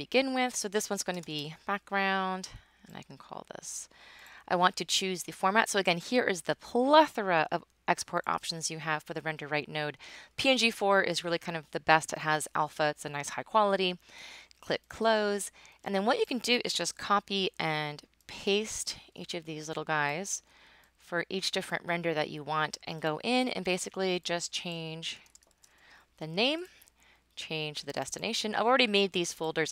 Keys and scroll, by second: 0.1-1.7 typing, 17.2 super+c, 17.5 super+v, 19.0 super+v, 20.2 super+v, 24.9-26.1 typing.